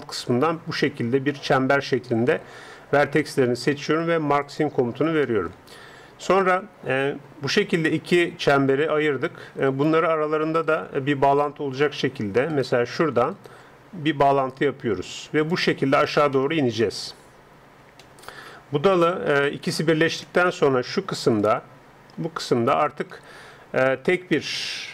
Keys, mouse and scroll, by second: 4.5-6.3 drag, 6.0-7.9 middle drag, 9.7-15.4 right drag, 11.4-15.4 middle drag, 15.4-17.3 drag, 16.3 middle click, 17.3-19.8 middle drag, 20.2-21.3 drag, 21.3-23.2 d, 21.4-23.2 drag.